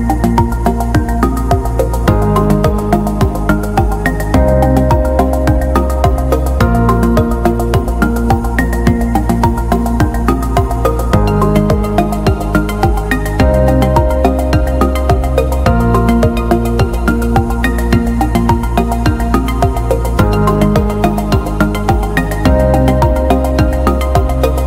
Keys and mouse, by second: 0.3 KP_3, 1.0 alt+z, 1.4 right click, 1.9 shift+middle click, 2.3 b, 4.9 w, 6.5 alt+z, 6.9 shift+middle click, 8.1 right click, 8.4 g, 9.5 right click, 9.7 g, 10.4 shift+middle click, 11.3 right click, 12.9 shift+right click, 13.2 f, 13.8 alt+right click, 14.6 f, 15.3-15.8 middle drag, 15.9 Tab, 16.2-16.7 middle drag, 16.7 KP_1, 17.4 Tab, 18.0 g, 20.6 KP_3, 21.3 middle click, 22.2 shift+middle click, 22.9 middle click, 24.3 right click.